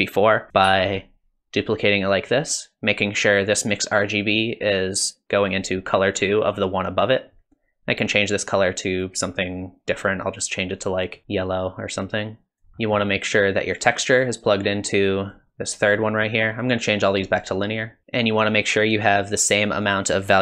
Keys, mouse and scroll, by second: 0.7 shift+d, 3.4 click, 8.9 click, 12.7 middle click, 12.7 scroll down 3, 12.8 middle click, 14.0 click, 16.5 click, 18.0 middle click, 18.0 scroll up 3, 19.8 click.